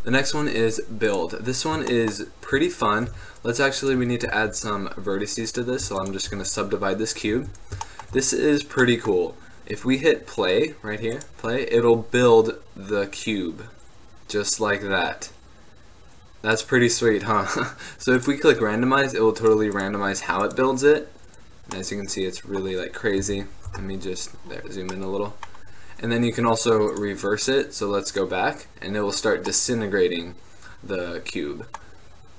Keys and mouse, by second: 0.4 click, 3.2 Tab, 3.2-4.4 drag, 4.4 w, 6.0 w, 6.5 w, 7.5 Tab, 16.7-20.9 drag, 21.9-22.6 middle drag, 23.3 KP_Enter, 23.8 KP_Decimal, 29.6-31.6 middle drag, 32.2-32.3 middle drag.